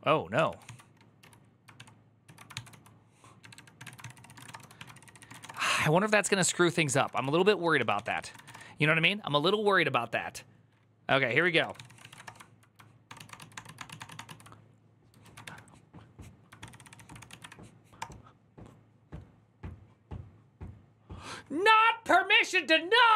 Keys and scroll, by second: 0.4 ctrl+d, 0.4 ctrl+c, 1.0 a, 1.5 ctrl+v, 2.1 ctrl+u, 2.3 ctrl+c, 2.5-8.6 typing, 11.1-12.4 typing, 12.8 ctrl+d, 12.9 ctrl+u, 15.2 ctrl+a, 15.2 2, 16.4 ctrl+c, 16.7-17.6 typing, 17.8 Return.